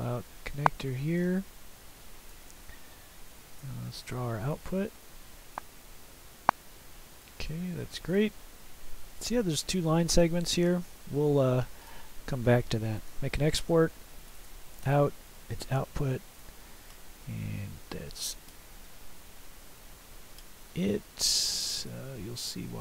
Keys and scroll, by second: 13.1 ctrl+e, 14.2 typing.